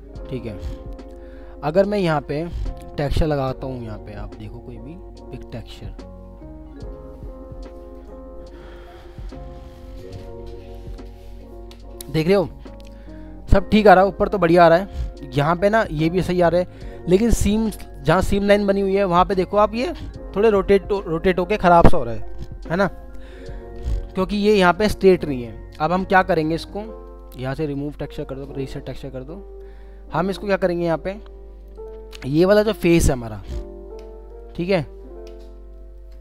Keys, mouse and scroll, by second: 14.1 scroll, 14.2 scroll up 1, 14.7 alt+middle click, 15.8 alt+middle click, 27.1 double click, 31.7 double click, 32.6 w, 33.3 middle click, 35.8 alt+middle click.